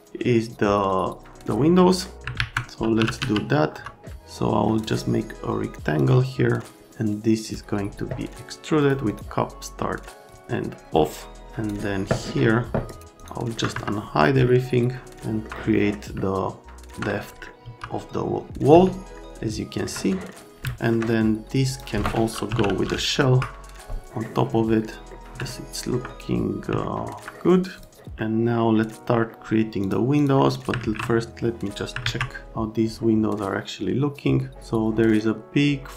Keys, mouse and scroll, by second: 2.0 middle click, 2.3 alt+q, 2.7-3.7 typing, 3.7 F3, 4.8 middle click, 6.0 middle click, 7.4 click, 8.8 click, 9.0 click, 10.3 click, 12.9 scroll, 13.2 click, 13.5 right click, 13.7 F3, 14.4 alt+right click, 17.6 F3, 19.1 alt+middle click, 20.1 middle click, 20.6 alt+middle click, 21.7 click, 22.2-23.0 typing, 25.1 right click, 25.5 alt+middle click, 26.8 alt+middle click, 27.2 middle click, 27.8 click, 27.9 middle click, 29.8 click, 30.1 click, 30.8 alt+1, 32.0 alt+q.